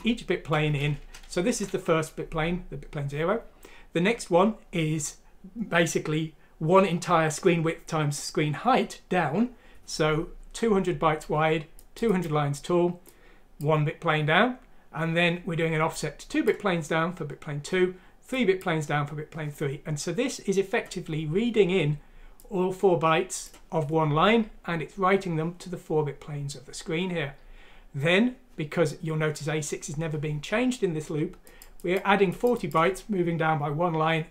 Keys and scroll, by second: 0.8 Home, 1.3 Down.